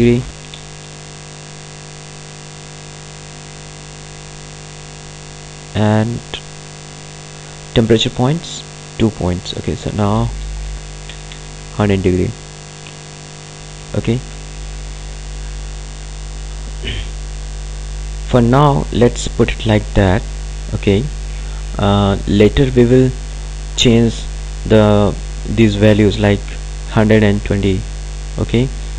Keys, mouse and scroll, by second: 4.2 click, 5.6 right click, 8.7 click, 12.1 click.